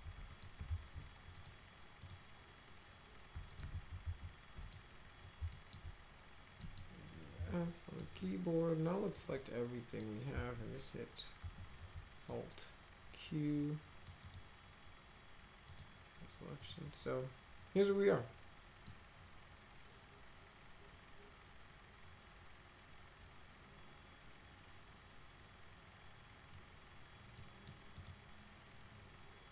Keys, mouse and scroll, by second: 0.2 click, 0.6 ctrl+z, 1.3 click, 2.0 right click, 3.5 ctrl+click, 3.7 ctrl+z, 4.0 ctrl+z, 4.6 click, 5.5 alt+middle click, 6.6 middle click, 7.3 f, 8.0 middle click, 9.1 click, 11.4 alt+q, 12.2-14.0 drag, 14.2 right click, 15.7 click, 16.6 click, 18.9-26.5 middle drag, 27.3 middle click, 27.9 right click.